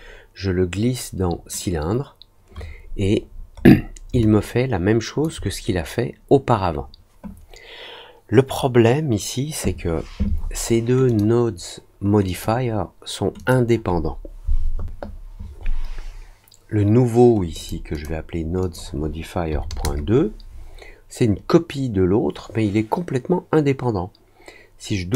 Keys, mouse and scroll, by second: 3.2 middle click, 3.5 middle click, 4.1-5.2 alt+drag, 11.0 click, 12.2 click, 13.3 click, 17.5 click, 17.9 click, 18.5 click, 25.1 click.